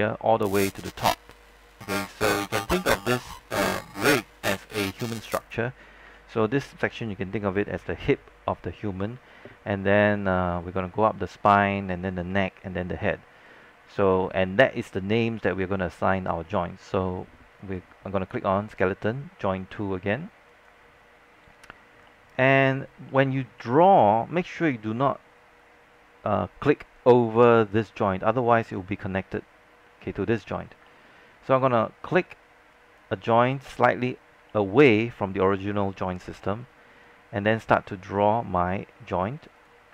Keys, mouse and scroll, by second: 2.4 scroll down 1, 2.7 alt+middle click, 3.3 scroll down 1, 3.6 alt+middle click, 4.9 alt+middle click, 6.2 alt+middle click, 17.8-18.9 drag, 21.6-21.9 scroll up 1, 22.3 alt+scroll up 1, 22.9-23.3 scroll up 2, 28.2-30.3 scroll down 1, 30.4-31.0 scroll up 1, 31.0-32.1 alt+middle drag, 32.9-34.1 drag, 34.7-35.2 alt+scroll up 2, 36.3 scroll down 1, 36.5 alt+middle click, 39.7 click.